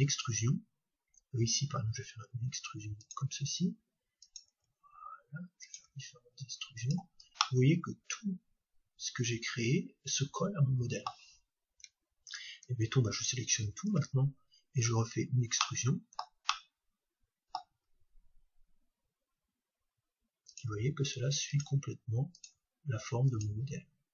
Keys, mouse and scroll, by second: 3.1-6.2 drag, 3.2 e, 5.9 e, 6.9-8.7 drag, 7.4-9.4 middle drag, 12.3-15.6 right drag, 13.6 a, 15.6-20.5 middle drag, 17.9 e, 20.7-24.1 drag, 20.7-24.1 e.